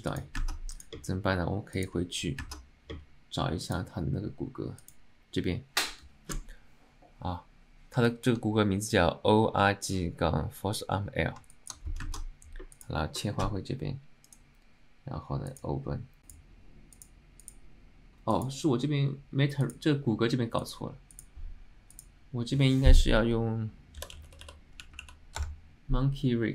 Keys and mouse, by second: 0.5-1.9 ctrl+right drag, 1.9 click, 2.6 ctrl+Tab, 3.8 click, 4.9-5.4 drag, 8.2 alt+middle click, 11.6 alt+click, 12.2 ctrl+Tab, 12.8 click.